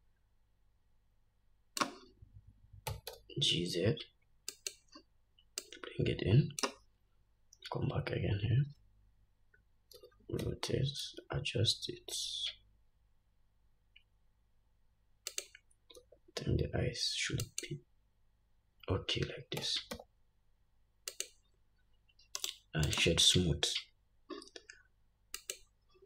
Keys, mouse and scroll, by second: 3.0 g, 5.8-15.6 drag, 10.1 r, 19.8 g, 22.5-26.0 right drag, 25.6-26.0 drag.